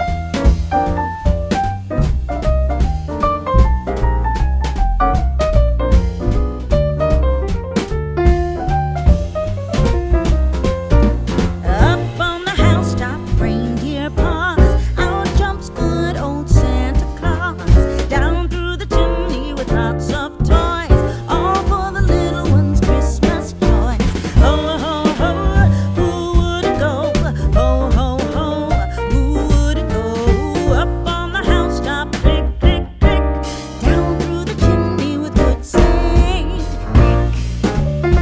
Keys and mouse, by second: 0.0 click, 2.5 click, 3.6 click, 5.2 g, 5.5 x, 7.5 click, 10.0 click, 10.9 e, 12.0 click, 12.4 s, 13.2 right click, 15.4 click, 17.1 s, 18.2 click, 19.3 click, 21.2 click, 22.2 middle click, 23.2 shift+middle click, 25.9 KP_3, 26.6 shift+middle click, 27.6 shift+middle click, 29.5 click, 30.2 alt+z, 30.5 click, 32.1 shift+click, 33.4 alt+z, 33.9 s, 34.4 y, 36.8 click, 37.4 middle click, 37.8 Tab.